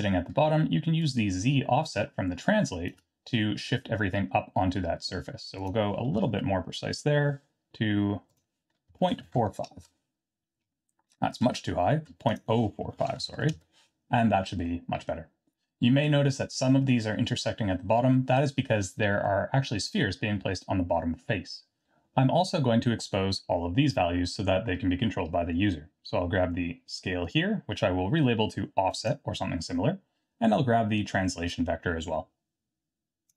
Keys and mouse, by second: 1.0-2.9 shift+drag, 4.1-4.7 middle drag, 5.6 click, 6.1 KP_Decimal, 8.4-10.4 drag, 8.4 KP_0, 12.4-14.1 drag, 14.6-16.0 middle drag, 19.2-19.6 middle drag, 27.3-29.1 drag, 31.6-33.3 drag.